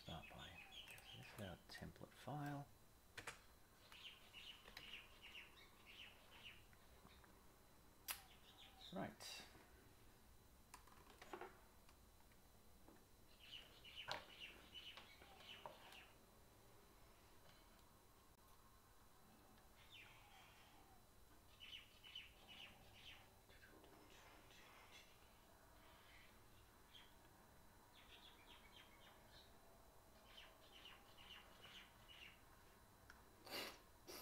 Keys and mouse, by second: 0.8 click, 1.8-3.4 middle drag, 3.1 KP_0, 4.8 alt+a.